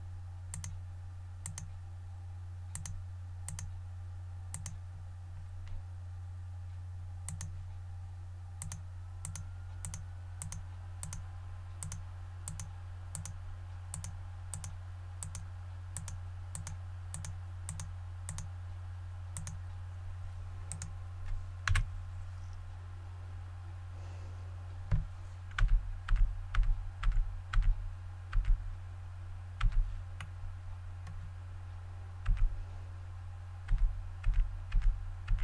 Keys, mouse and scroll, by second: 20.7 right click, 21.7 KP_1, 25.6-28.3 typing, 29.3-30.1 typing, 30.2-31.2 middle drag, 32.2 typing, 34.2-35.4 typing.